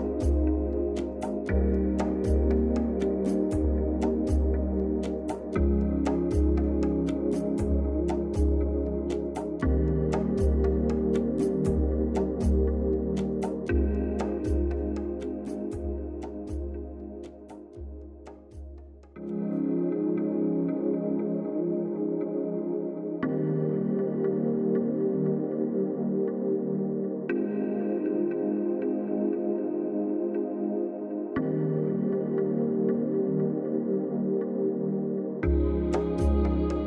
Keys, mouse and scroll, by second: 4.0 ctrl+z, 5.9 click, 8.0 ctrl+-, 9.4-12.9 drag, 22.9 click, 24.2 z, 24.9-25.8 drag, 26.9 right click, 27.7 click, 29.4-30.1 typing, 30.5 click, 32.5 click, 36.2 click.